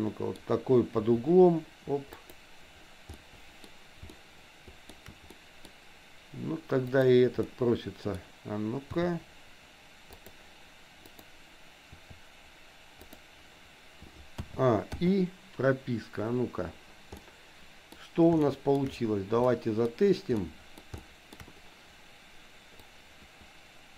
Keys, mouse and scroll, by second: 1.1 r, 3.2 middle click, 4.2 shift+middle click, 5.3 middle click, 7.0 click, 7.5 middle click, 9.0 r, 11.0 click, 12.0 r, 14.3 a, 15.0 i, 17.2 middle click, 18.5 shift+middle click, 19.5 middle click, 20.3 middle click, 21.1 shift+middle click, 22.8-23.9 drag.